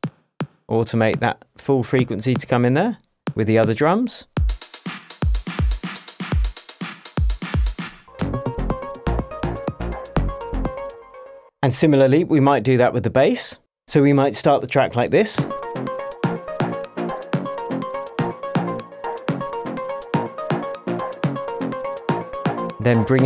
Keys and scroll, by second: 2.4 space, 7.8 space, 10.9 space, 12.4 super+c, 15.5 space.